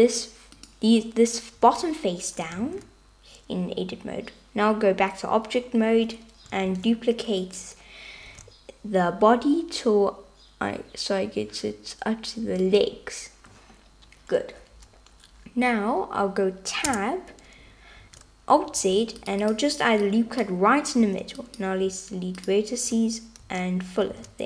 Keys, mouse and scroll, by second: 1.7 Tab, 2.8 alt+z, 6.8 shift+d, 8.4 g, 17.0 Tab, 18.1 alt+z, 19.1 super+r, 20.3 click, 21.1 x, 23.5 f, 24.3 alt+z.